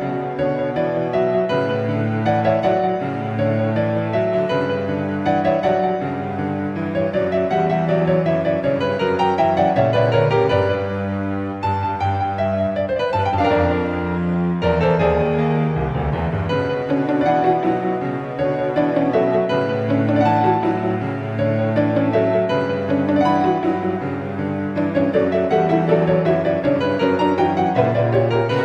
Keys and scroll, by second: 1.2 alt+z.